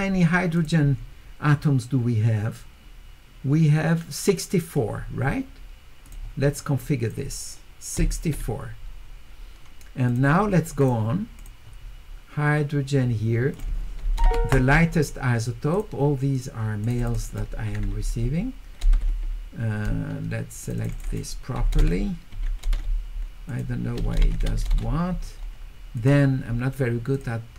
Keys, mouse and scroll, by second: 0.6 click, 6.0 click, 6.8 click, 10.1 click, 10.8 click, 11.4 click, 13.5 click, 15.7 click, 16.8 click, 17.0 click, 17.2 click, 20.3-23.5 scroll down 2, 20.6 click, 20.9 click, 21.1 click, 23.5 click, 23.5-24.2 scroll down 1, 24.2 scroll down 1, 24.2 q, 26.0 click, 27.1 click.